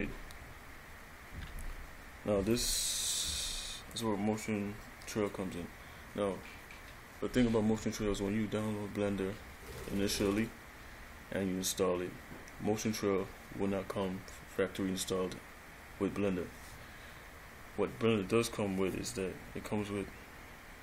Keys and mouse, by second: 4.1 click.